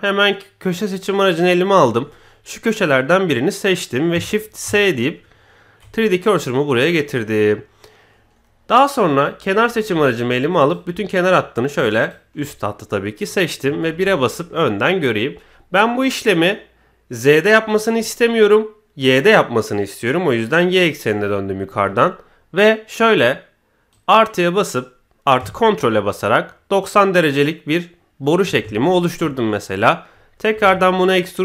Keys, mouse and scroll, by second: 0.6 click, 1.7 click, 2.0 middle click, 4.6 shift+s, 9.5 click, 10.6 alt+click, 13.9 KP_1, 19.0 click, 23.9-28.4 drag, 28.7 shift+middle click, 30.5 e.